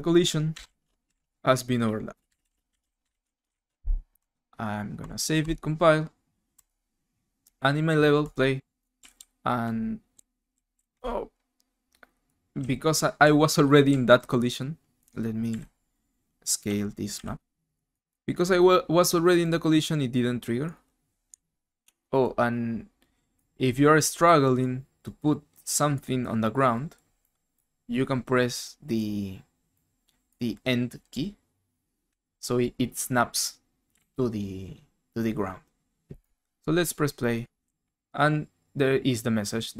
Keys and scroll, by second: 0.0-5.7 typing, 9.6-11.4 typing, 12.0 Escape, 13.0-14.7 typing, 15.8-17.8 typing, 21.3 ctrl+z, 32.0 End, 33.7-34.5 typing, 36.7-38.5 typing.